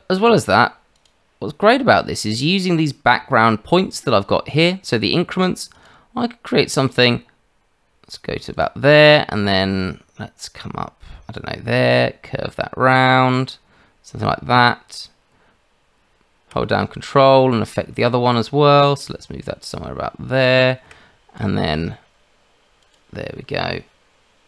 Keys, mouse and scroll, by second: 0.9 click, 4.8 click, 5.7 click, 8.5 click, 8.9 shift+middle click, 9.4 click, 11.3 click, 22.8 click.